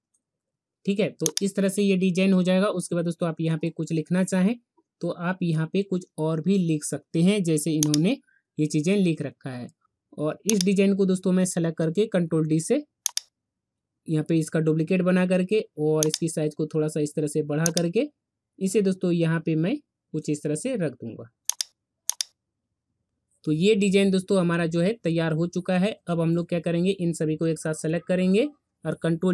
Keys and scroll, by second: 11.9 ctrl+d.